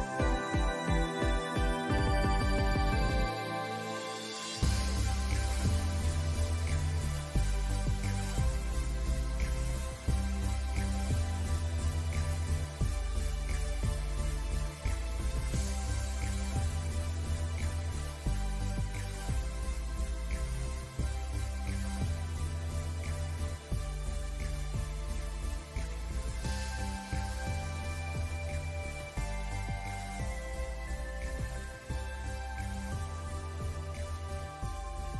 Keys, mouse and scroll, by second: 3.0-3.4 scroll down 1, 3.4 click, 4.7 click, 5.0-5.7 alt+scroll up 3, 5.9-6.3 scroll down 2, 6.7 click, 7.3-8.0 alt+scroll up 3, 8.0 alt+scroll down 1, 8.2 ctrl+s, 8.3 space, 8.6 scroll down 1, 9.0 click, 12.0 scroll up 1, 12.0 alt+scroll down 1, 12.2 click, 14.2 ctrl+z, 14.5 click, 16.2 scroll down 1, 16.4 click, 23.5 alt+scroll up 1, 23.7 alt+scroll down 1, 23.8 click, 24.0 scroll up 2, 24.3 alt+scroll down 1, 24.7 alt+scroll up 1, 24.9-26.1 drag, 26.1 click, 26.8 click, 27.5 alt+scroll down 1, 28.0 click, 28.4 typing, 28.6-30.1 drag, 30.1 alt+scroll down 1, 30.4 click, 30.7 ctrl+s, 30.8 scroll down 1, 31.3 alt+scroll up 1, 31.7-33.0 drag, 33.3 click, 33.7 click, 34.2 alt+scroll down 1, 34.3-34.8 scroll up 2, 34.5 click, 34.8 alt+scroll down 1, 35.0 click.